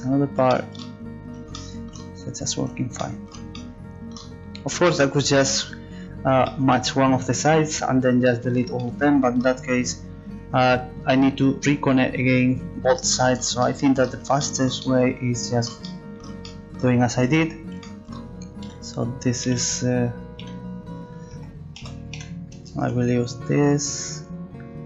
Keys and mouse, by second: 9.1 middle click, 13.1 middle click, 17.2 a, 18.7 x, 19.6 Escape, 20.4 c, 21.8 z, 22.2 c.